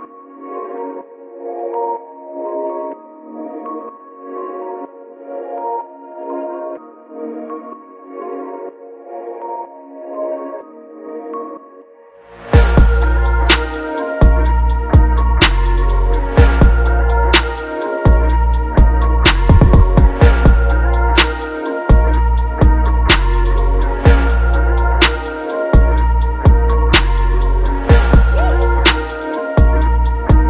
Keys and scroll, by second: 0.1 ctrl+KP_Subtract, 2.9 ctrl+g, 5.6 ctrl+KP_Add, 7.1 ctrl+KP_Subtract, 7.9 ctrl+d, 8.6 ctrl+KP_Subtract, 15.5 Return, 20.6 Return, 21.2 ctrl+t, 22.1 Return.